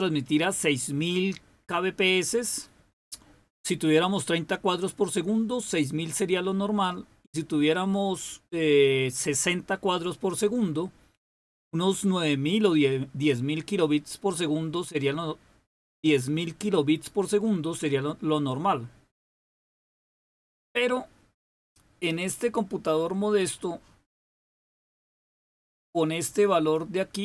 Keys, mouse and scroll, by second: 25.2-27.2 drag.